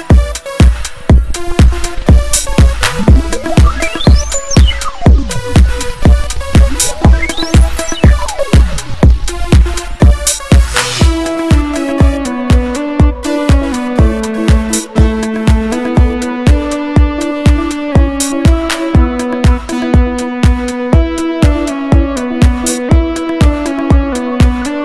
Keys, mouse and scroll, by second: 0.9 click, 4.4 click, 5.3 click, 8.9 click, 10.5 click, 10.9 click, 12.9-13.3 ctrl+scroll down 4, 15.7-16.0 ctrl+scroll down 4, 18.3 click, 21.3 click.